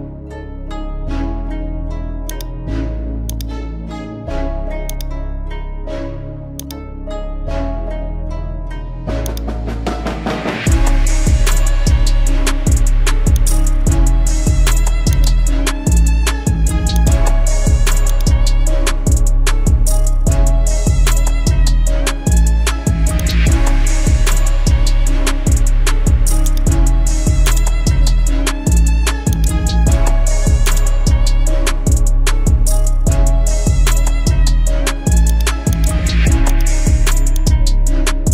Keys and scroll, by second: 11.6 ctrl+j, 25.1 ctrl+i, 30.2 x.